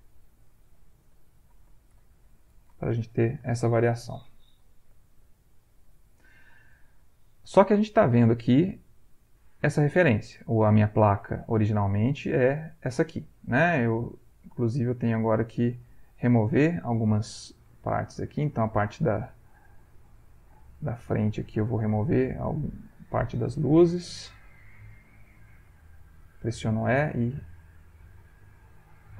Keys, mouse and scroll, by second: 0.2 shift+click, 1.0-3.8 shift+drag, 4.1 ctrl+shift+a, 5.5-6.6 ctrl+middle drag, 7.7 click, 9.2 click, 10.3 middle click, 11.0-15.7 ctrl+drag, 15.7 ctrl+middle click, 17.8 click, 20.0 click, 21.3 click, 22.5 click, 23.8 shift+click, 25.3 e, 25.8 shift+click, 26.6-28.9 shift+drag.